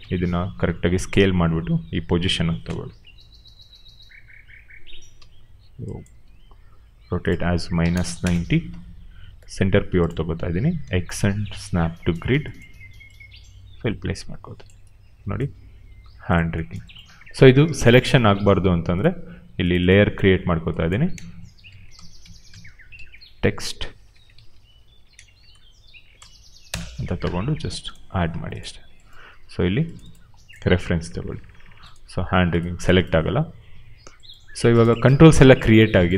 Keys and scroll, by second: 2.5 f, 3.7 w, 5.0 e, 6.2 ctrl+a, 7.3-8.7 typing, 10.7 x, 17.5 ctrl+z, 21.4-25.0 typing, 26.6 Return.